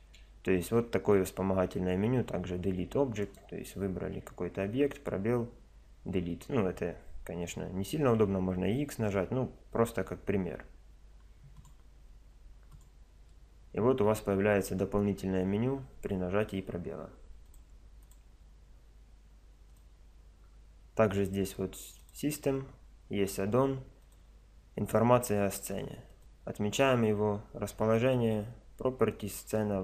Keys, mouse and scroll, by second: 0.0 space, 3.2-5.1 drag, 4.1 space, 13.4-16.7 drag.